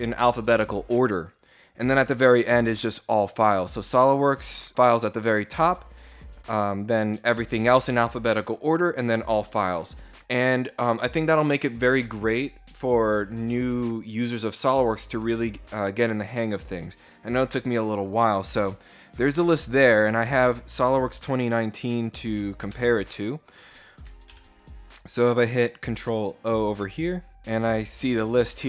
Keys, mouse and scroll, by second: 20.3 click, 22.4 alt+Tab, 27.3-28.5 drag.